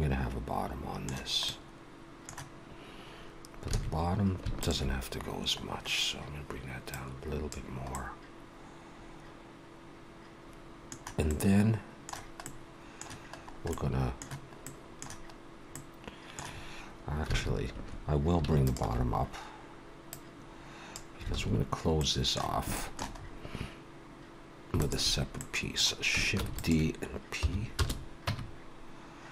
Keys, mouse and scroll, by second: 1.4 middle click, 3.7 alt+a, 4.6 alt+shift+click, 6.0-6.7 scroll down 1, 6.9 click, 7.9 middle click, 11.2 middle click, 12.4 middle click, 13.3 scroll up 1, 13.7 middle click, 14.6 middle click, 15.7 middle click, 17.3 alt+a, 18.6 alt+shift+click, 20.1 click, 21.3 alt+a, 21.9 middle click, 22.7 shift+middle click, 23.1-24.3 scroll up 1, 24.3-24.6 scroll up 1, 24.8 alt+shift+click, 25.3 middle click, 26.3 shift+d, 27.3 p, 28.2 Tab.